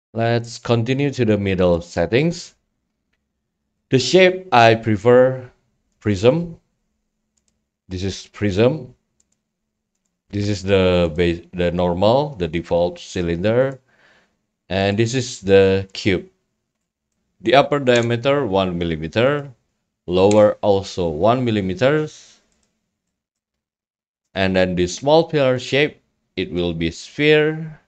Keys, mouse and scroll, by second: 0.0 drag, 1.7-2.9 drag, 3.8-4.9 drag, 6.0 click, 9.6 click, 14.8 click, 16.5 click, 16.8 scroll, 17.1 right click, 20.3 click, 22.8 click, 23.3 scroll, 23.6 right click, 23.7 scroll up 3, 24.3 click, 25.7-26.3 drag, 27.7 click.